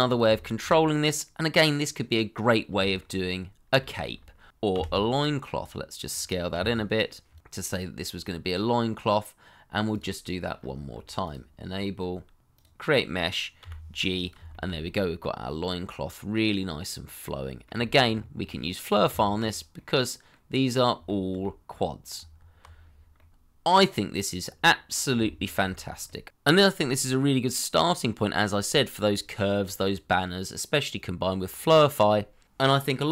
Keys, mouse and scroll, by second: 0.2 shift+middle click, 0.5 middle click, 2.2 shift+middle click, 2.7-3.0 scroll down 1, 3.1 shift+middle click, 3.4-3.9 scroll up 1, 4.0 shift+middle click, 5.1 s, 6.6 g, 10.5-11.3 scroll up 1, 11.6-12.4 scroll down 1, 13.6 g, 14.5 shift+middle click, 14.8 middle click, 17.8 shift+middle click, 18.1 scroll up 1, 18.4 middle click, 19.1 Tab, 19.7 middle click, 21.0 shift+middle click, 22.1 Tab, 22.8-23.1 scroll down 1, 23.1 middle click, 25.2 shift+middle click, 25.8 scroll down 1, 26.0 middle click, 26.7 shift+middle click, 27.0-27.3 scroll up 1, 27.4 shift+middle click, 27.9-28.2 scroll down 1, 28.2 middle click, 29.2 shift+middle click.